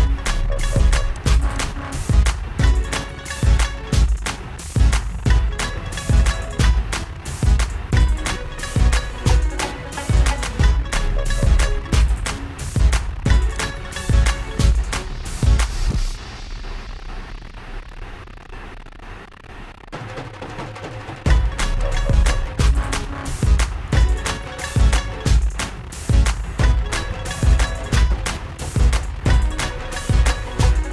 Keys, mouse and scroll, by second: 1.5 click, 1.9 click, 6.7 scroll, 7.5 ctrl++, 7.5 click, 13.7 click, 18.1-27.6 alt+drag, 29.1 click.